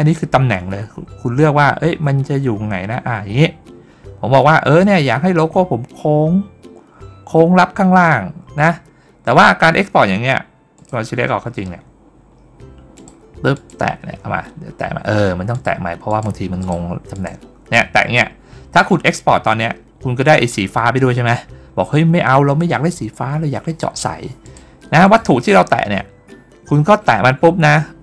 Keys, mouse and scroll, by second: 0.0-4.7 drag, 10.6 click, 12.8 click, 13.4 click, 15.4 click, 15.9 click, 16.5 click, 17.0 click, 24.3 click, 24.9 click.